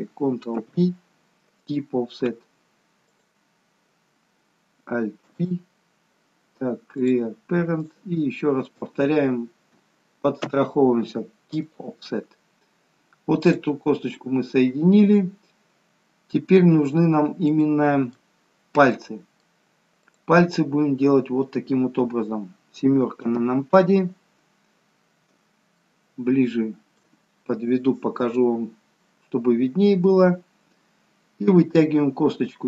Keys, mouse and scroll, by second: 0.7 ctrl+p, 3.1 click, 5.3 alt+p, 7.9 click, 8.7 shift+click, 10.4 ctrl+p, 13.5 click, 16.3 middle click, 20.1 click, 23.4 KP_7, 24.9 scroll up 3, 25.8 shift+middle click, 25.8 scroll up 2.